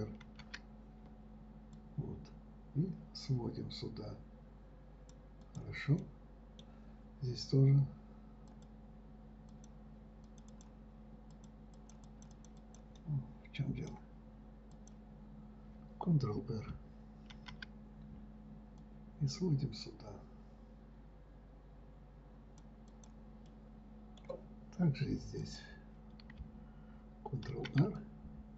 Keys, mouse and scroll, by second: 6.4-8.9 middle drag, 8.9 click, 9.9 click, 10.6 click, 10.9 click, 11.7 click, 12.1 click, 12.4 click, 12.7 click, 13.0 click, 13.4-15.1 middle drag, 15.1 click, 17.7 ctrl+r, 23.9-25.8 middle drag, 25.8 click, 27.9 ctrl+r.